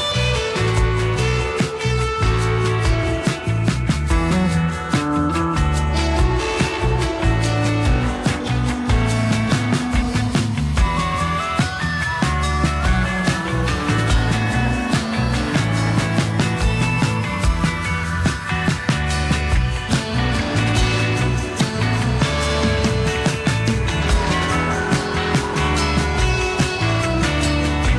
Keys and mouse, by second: 0.2 ctrl+click, 0.6 shift+click, 0.9-5.4 shift+drag, 1.0 2, 6.4 3, 6.6-9.4 drag, 10.0 shift+click, 10.6 shift+click, 11.2 click, 12.5 shift+click, 13.1 shift+click, 14.4 click, 14.9 click, 15.3 click, 15.9 click, 16.2 click, 16.5 click, 16.8 click, 18.3 1, 18.5 g, 20.0 r, 21.2 e, 22.7-23.7 drag, 23.7 alt+s, 25.1 click, 25.6 click, 26.6 click, 27.6 3, 27.6 f.